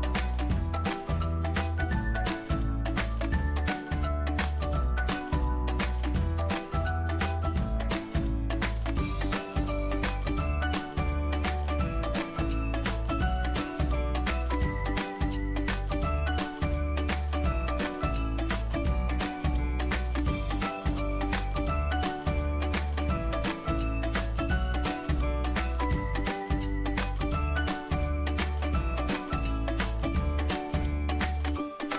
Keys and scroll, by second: 28.0 ctrl+d.